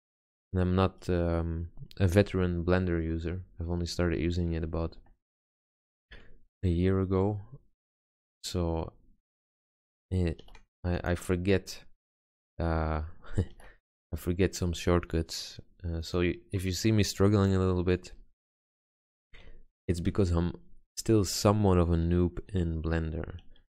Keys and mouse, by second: 1.0-3.4 drag, 6.7 ctrl+r, 9.5 ctrl+z, 10.6 ctrl+r, 12.9 ctrl+z, 13.7 ctrl+r, 20.3 a, 21.3 b, 22.7 g.